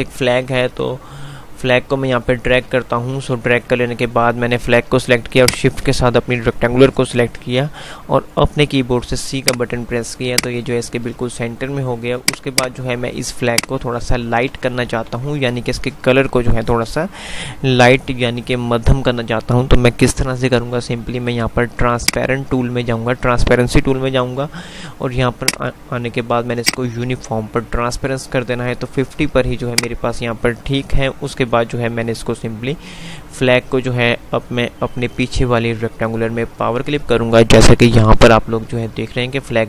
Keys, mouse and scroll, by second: 1.5 F2, 2.3 click, 2.5 F2, 3.2 F3, 5.7 shift+click, 8.8 c, 9.5 click, 10.0 F2, 10.5 click, 14.5 ctrl+r, 22.0 click, 24.2 F5, 31.3 F5.